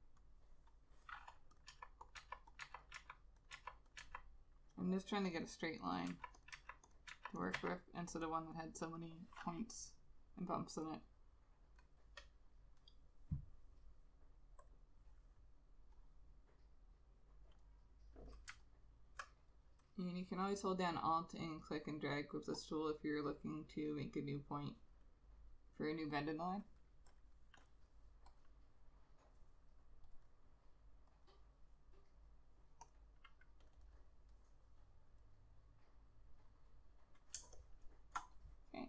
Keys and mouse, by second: 1.8 Delete, 2.3 Delete, 2.8 Delete, 3.1 Delete, 3.6 Delete, 4.1 Delete, 6.2 Delete, 6.6 Delete, 7.2 Delete, 7.7 Delete, 18.8 alt+click, 28.5 double click, 33.9 double click, 37.5 space.